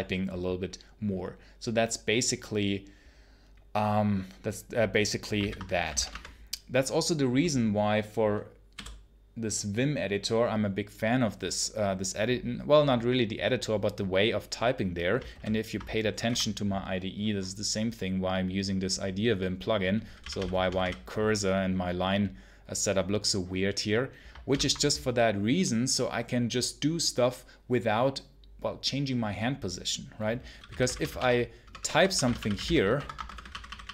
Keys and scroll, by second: 5.2 ctrl+c, 5.7 v, 5.8 space, 6.0 Return, 15.2 ctrl+super+h, 15.8-16.6 typing, 20.1 l, 24.3 ctrl+super+l, 30.2-33.9 typing.